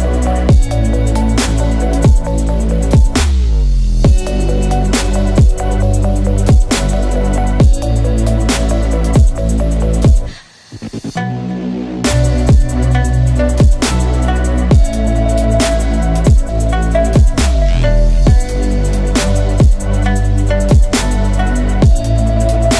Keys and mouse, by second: 0.1 click, 0.8-3.0 middle drag, 3.8 ctrl+l, 4.6 h, 5.1 2, 5.6 middle click, 6.9 shift+middle click, 8.2 click, 9.0 ctrl+click, 9.6 shift+click, 10.7 alt+shift+click, 11.2 shift+click, 12.2 ctrl+e, 13.2 a, 13.7 a, 14.8 u, 16.8 a, 18.5 3, 18.9 click, 19.8 ctrl+l, 20.1 h, 20.7 2, 21.0 middle click, 21.8 shift+middle click, 22.1 middle click.